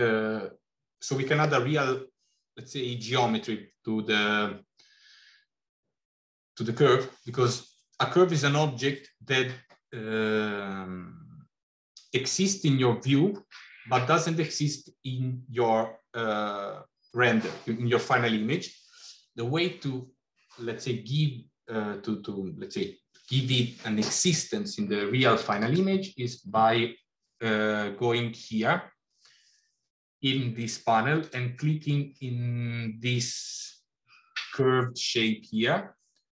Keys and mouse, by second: 25.4 click, 31.1 click.